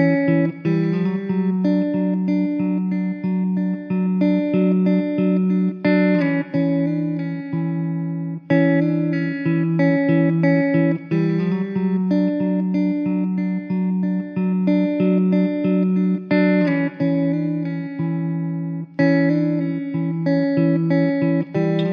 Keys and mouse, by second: 0.1 alt+w, 1.3 middle click, 1.9 2, 3.8 2, 6.1 w, 7.5 alt+w, 8.2 alt+middle click, 12.5 alt+middle click, 14.4 alt+middle click, 16.9 middle click, 20.0 alt+middle click, 21.4 alt+w.